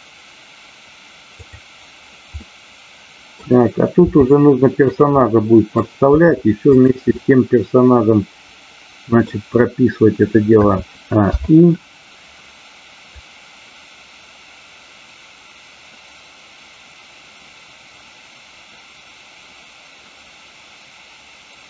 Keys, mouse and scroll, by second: 1.2 click, 2.4-3.4 middle drag, 3.9 r, 4.8 click, 5.1 middle click, 6.8 drag, 6.8 r, 7.1-9.3 middle drag, 13.0-21.6 drag.